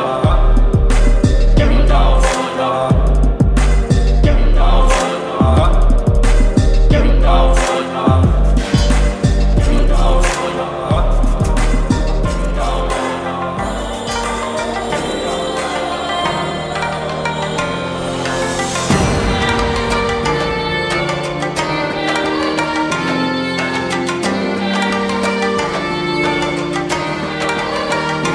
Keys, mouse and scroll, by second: 1.4-5.6 drag, 9.4 shift+click, 11.4 ctrl+g, 13.0 ctrl+j, 14.5 ctrl+e, 16.3 click, 16.8 right click, 18.3 click, 20.4 v, 20.7 ctrl+t, 23.4 ctrl+t, 23.7-25.0 alt+drag, 25.6 alt+scroll down 2, 26.2-28.1 drag.